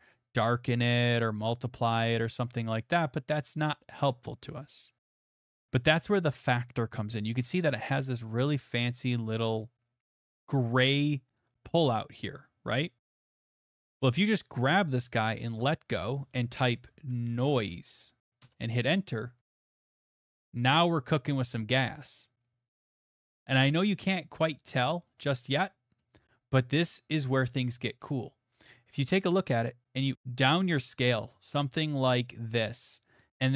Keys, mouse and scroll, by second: 0.1 click, 2.0 click, 2.6 click, 5.1 middle click, 12.2 click, 13.1 click, 15.6 click, 17.0-17.6 typing, 18.4 Return, 19.9 middle click, 20.2 typing, 21.0 click, 21.5 middle click, 22.4 click, 22.9 middle click, 23.6 middle click, 23.8 middle click, 23.9 middle click, 24.3 shift+middle click, 24.5 shift+middle click, 24.8 middle click, 26.4 middle click, 26.7 shift+middle click, 26.9 middle click, 27.9 middle click, 29.6 middle click, 29.8 middle click, 32.3 click.